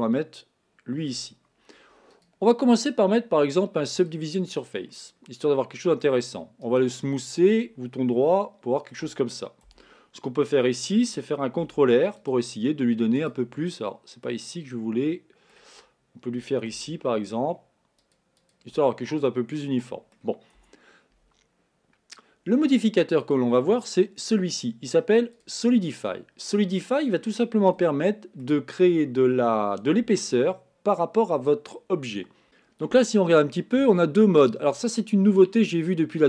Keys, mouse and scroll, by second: 2.2-5.0 drag, 5.0-6.1 middle drag, 6.1-6.7 scroll up 1, 6.7-8.4 right drag, 8.4-9.7 shift+middle drag, 9.7 Tab, 11.7 ctrl+r, 13.6-16.7 middle drag, 16.7 ctrl+r, 18.9-20.3 middle drag, 20.3 scroll up 1, 20.6 Tab, 23.2-26.2 drag, 26.5-31.1 middle drag, 32.4 Tab.